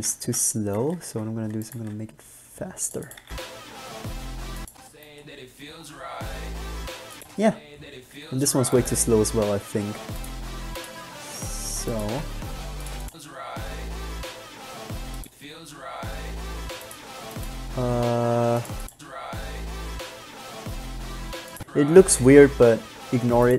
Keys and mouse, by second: 0.4 Left, 1.9 g, 3.4 alt+a, 9.8 g, 11.2 g, 12.4 g, 17.6 g, 21.8-23.4 drag.